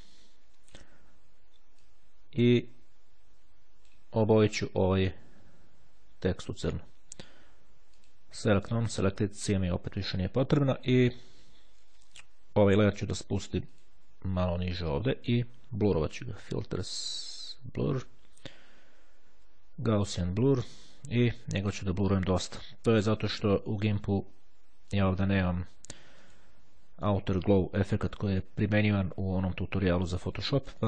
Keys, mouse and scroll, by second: 1.9-4.6 drag, 8.2-9.4 drag, 13.9 click, 16.6 click, 19.8 click, 23.0 click, 24.7 click, 25.8 click, 27.1 click, 27.6 click, 28.2 click, 30.0 click.